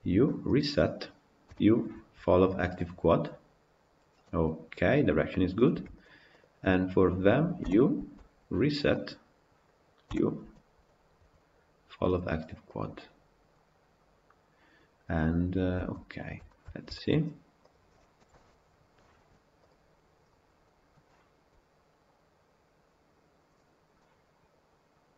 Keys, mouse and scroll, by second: 0.6 u, 3.3 u, 5.4 click, 6.1 shift+click, 9.0 u, 12.8 u, 15.7 Tab, 15.9-16.3 scroll down 5, 16.3-17.6 shift+middle drag, 17.6 click, 18.1 KP_Decimal, 23.2-23.8 drag, 23.8-25.1 middle drag.